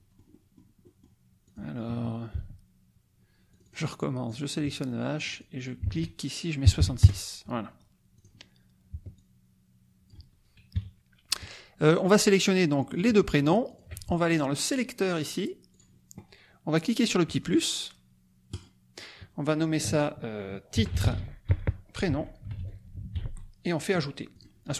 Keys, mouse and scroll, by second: 0.8 click, 1.6 click, 2.4 ctrl+z, 3.5 click, 4.3 click, 5.2 click, 5.8 ctrl+a, 6.6 KP_6, 7.0 KP_Enter, 8.1 click, 9.1-10.3 ctrl+drag, 10.7 KP_Subtract, 12.9 click, 13.8 shift+click, 14.7 click, 15.8 click, 18.5 click, 20.5-23.5 typing, 24.3 click.